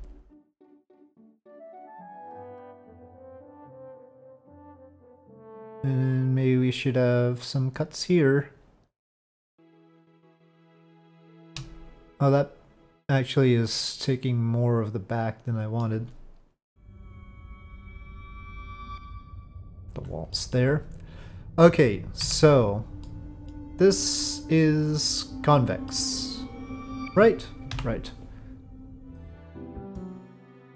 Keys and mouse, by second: 1.8 middle click, 2.6-3.9 drag, 4.2-5.3 middle drag, 6.3 click, 7.7 click, 8.3 click, 10.3 click, 11.2 shift+click, 11.6-15.8 middle drag, 16.9-20.0 drag, 20.4 middle click, 22.2 KP_Divide, 23.0 middle click, 24.0-25.9 middle drag, 26.2 middle click.